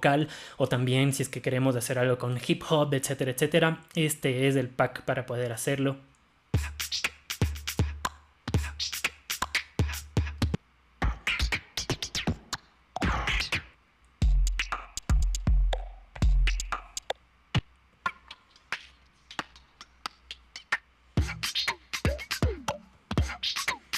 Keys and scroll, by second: 10.4 Down, 17.0 Down, 17.1 Down, 20.7 Down.